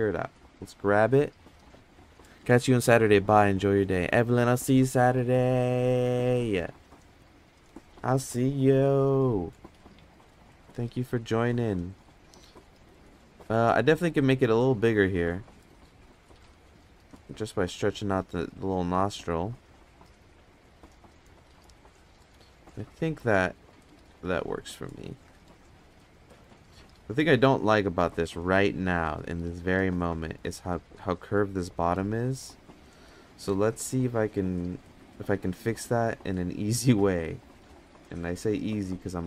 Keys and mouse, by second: 8.9 f, 10.1-12.7 drag, 13.0 ctrl+z, 13.5-15.3 shift+drag, 15.5 ctrl+z, 16.1-20.5 drag, 25.1 ctrl+Tab, 32.5 Tab, 34.5 click, 38.6 click.